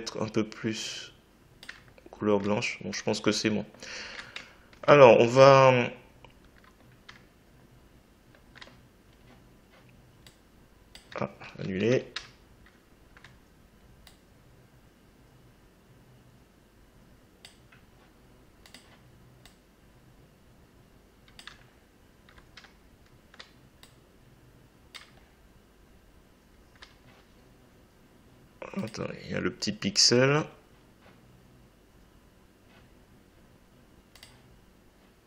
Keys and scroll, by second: 11.4 ctrl+z.